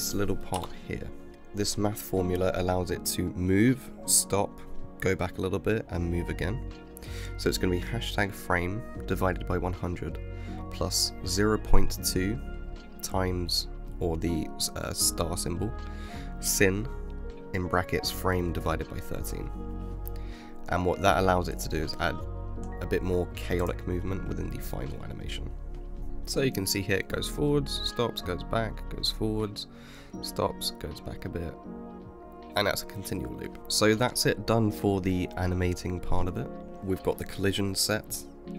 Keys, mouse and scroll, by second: 26.0 space, 34.4-35.0 scroll down 3, 35.4-36.6 middle drag.